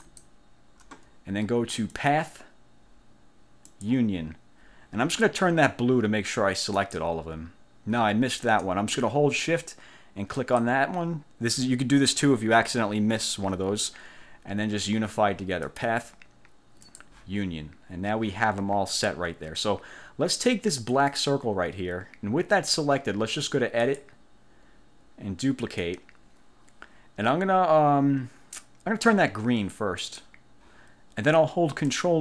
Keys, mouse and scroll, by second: 0.2 shift+click, 2.1 click, 3.8 click, 6.9 click, 10.4 shift+click, 15.8 click, 17.0 click, 21.0 click, 24.0 click, 25.8 click, 30.2 click.